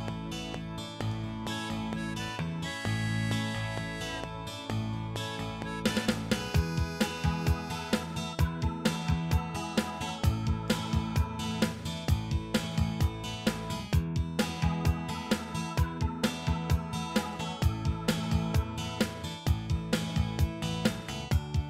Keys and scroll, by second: 4.1 ctrl+s, 12.1 ctrl+s.